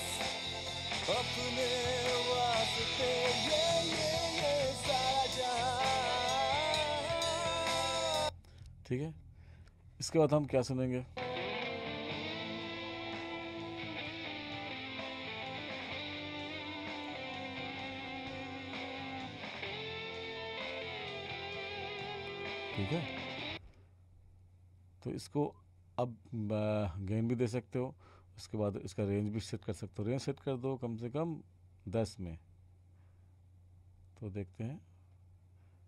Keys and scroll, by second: 23.5 space.